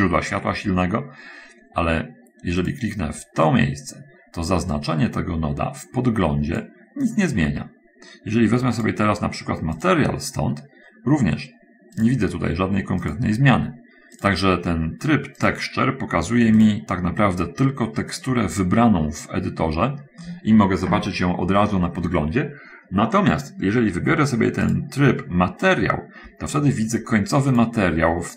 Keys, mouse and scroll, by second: 3.0 click, 4.9-7.2 drag, 10.2 click, 11.9 click, 14.6 click, 15.8 click, 16.7 click, 18.3 click, 25.1 click, 27.9 click.